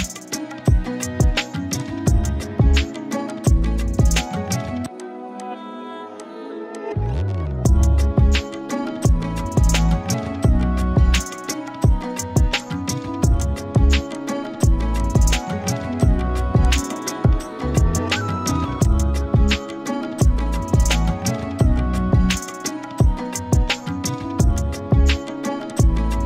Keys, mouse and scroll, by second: 0.7 right click, 1.7 click, 5.8 z, 6.2 click, 6.3-7.0 z, 6.7 click, 6.8 z, 12.1 scroll down 1, 12.3-14.1 typing, 12.5 click, 13.4 click, 13.7 click, 14.1 click, 16.7 click, 17.0 z, 18.1 click, 18.7 z, 18.8-20.7 click, 19.2-20.7 z, 20.9 click, 22.3 right click, 25.7 click.